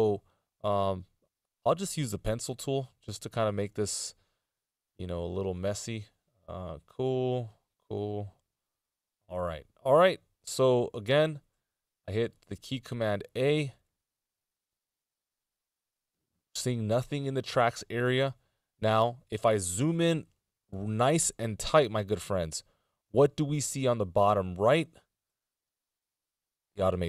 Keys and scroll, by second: 1.9 p, 11.7 a, 22.2 z.